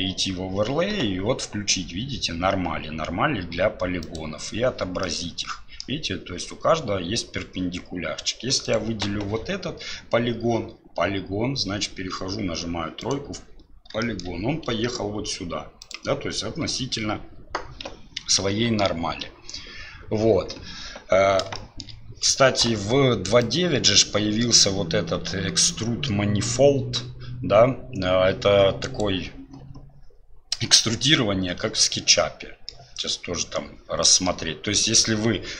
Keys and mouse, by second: 5.0 middle click, 13.1 middle click, 14.0 shift+middle click, 18.4 ctrl+z, 21.6 shift+middle click, 23.9-29.0 drag, 31.9 middle click, 34.0 middle click, 34.9 click.